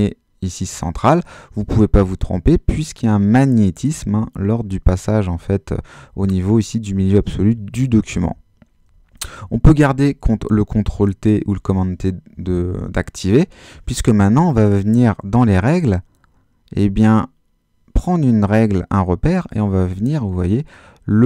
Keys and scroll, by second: 9.6 super+t.